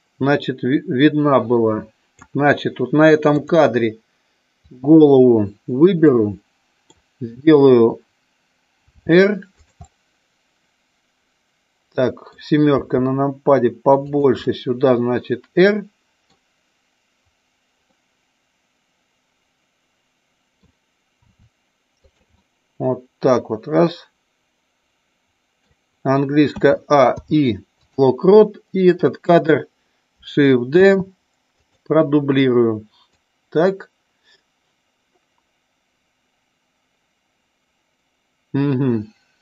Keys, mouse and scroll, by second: 3.3 click, 4.6 click, 6.0 middle click, 8.9 r, 9.9-12.3 middle drag, 12.6 r, 14.0 click, 14.3-16.3 middle drag, 17.9-20.5 middle drag, 21.1 r, 22.4-25.5 middle drag, 26.5 a, 27.1 i, 28.9 click, 30.8 shift+d, 33.1-39.4 drag.